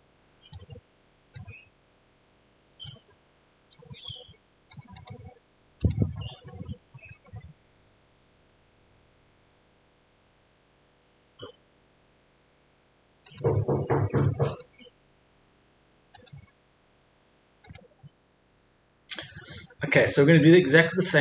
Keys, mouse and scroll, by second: 5.3 scroll up 1, 5.8 click, 6.2 middle click, 8.5-8.9 scroll up 1, 8.9-10.2 scroll down 1, 10.2-13.2 scroll up 1, 13.2 click, 20.0-21.2 middle drag.